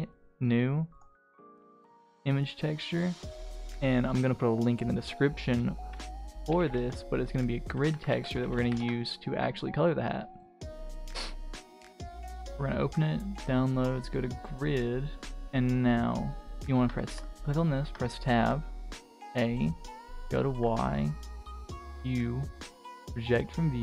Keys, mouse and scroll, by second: 0.9-2.1 drag, 11.9 click, 15.3 Tab, 16.3 middle click, 16.3-16.7 scroll up 1, 16.7 Tab, 16.9 click, 17.8 Tab, 19.0 a, 20.0 click, 21.4 u.